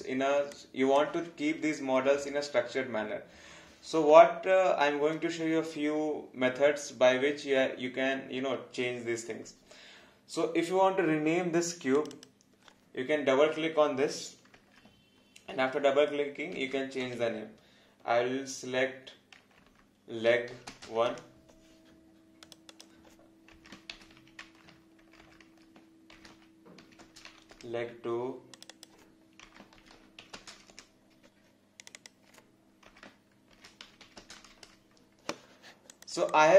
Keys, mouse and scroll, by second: 0.5 alt+click, 12.0 click, 16.3-17.5 typing, 20.5 g, 20.6 space, 20.8 1, 21.0 Return, 22.4 click, 24.0 shift+l, 26.3 e, 27.0 space, 27.3 2, 27.5 Return, 28.5 click, 29.7-31.0 typing, 31.8 click, 33.7-34.5 typing, 34.6 Return, 35.9 click, 36.3 alt+click.